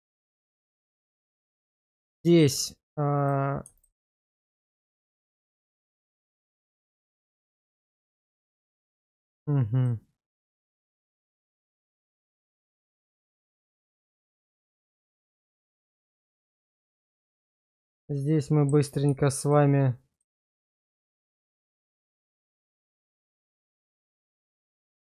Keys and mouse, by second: 0.1 shift+middle click, 1.0 shift+middle click, 3.2 click, 5.8 middle click, 6.4 shift+middle click, 9.2 click, 10.5 Tab, 11.4 middle click, 12.3 shift+middle click, 13.0 x, 14.9 Tab, 16.7 middle click, 17.3 shift+middle click, 18.3 middle click, 19.4 shift+click, 20.1 shift+click, 21.3 x, 22.6 middle click, 23.2 shift+middle click, 24.2 alt+click.